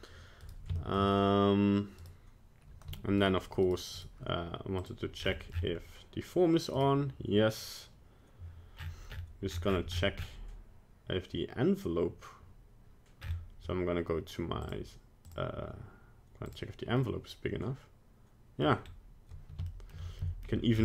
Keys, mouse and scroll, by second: 0.4 right click, 0.8 shift+middle click, 2.0 right click, 3.2 right click, 3.6 right click, 3.9 right click, 4.8 click, 5.2-6.5 scroll down 14, 6.8 right click, 8.9-9.7 scroll up 19, 9.7 scroll down 2, 9.8-11.5 scroll down 14, 11.5-11.9 scroll down 4, 13.2-14.6 scroll up 8, 14.6 click, 15.2 click, 17.0 middle click, 18.8 scroll up 1, 19.7 shift+middle click, 20.2 middle click, 20.7 scroll down 4.